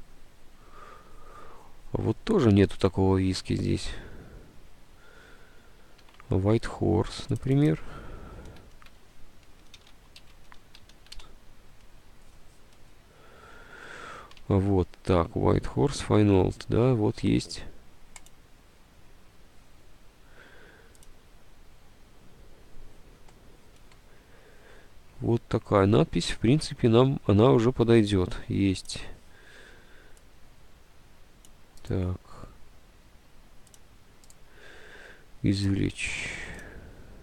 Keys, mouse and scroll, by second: 3.4 Tab, 6.7 Tab, 8.3-11.8 typing, 14.6 Tab, 15.7 alt+Tab, 25.9 alt+Tab, 26.8 Tab.